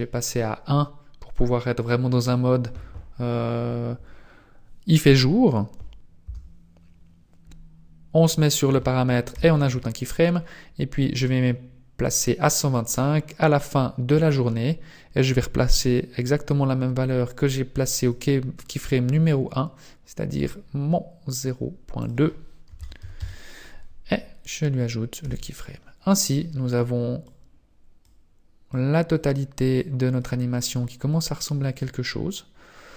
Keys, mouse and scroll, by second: 9.4 i, 11.4 click, 17.4 click, 20.5 click, 22.0 click, 25.4 click, 25.4 i, 27.4 click, 28.8 click, 29.9 click, 31.2 click.